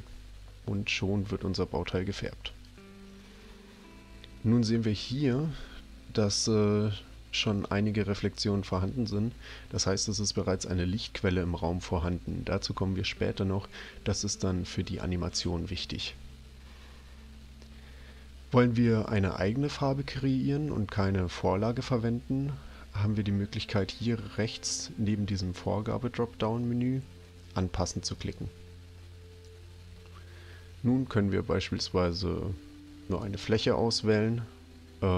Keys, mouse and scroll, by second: 2.5 click, 28.2 click, 33.1 click.